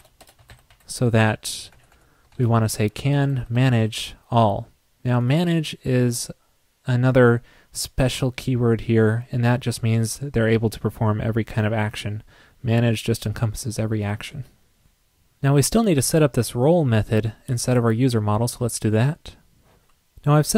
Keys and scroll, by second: 1.9 alt+Right.